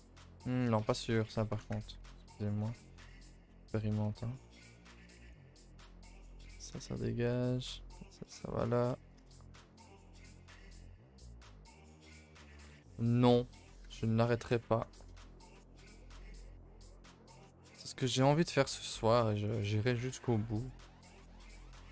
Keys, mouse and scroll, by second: 0.4 middle click, 5.0 click, 5.6 click, 9.6 middle click, 9.9 a, 10.1 middle click, 11.9 middle click, 12.3-12.6 scroll up 2, 12.6 click, 12.9 middle click, 13.8 h, 14.7 ctrl+z, 15.1 g, 16.0-17.1 middle drag, 17.2-18.4 shift+middle drag, 18.4-18.9 scroll up 2, 18.9 middle click, 19.4 click, 19.6 middle click, 20.0 g, 20.8-21.9 middle drag.